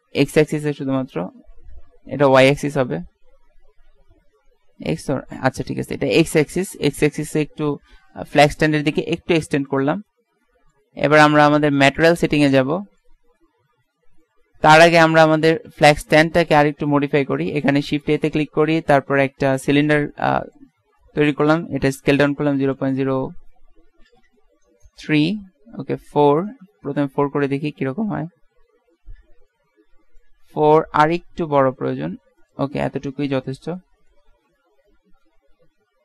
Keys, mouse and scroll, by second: 10.2-11.3 middle drag, 14.9 Tab, 15.8 Tab, 18.2 shift+a, 21.6 s, 27.3 KP_Decimal, 31.1 s, 33.3 middle click.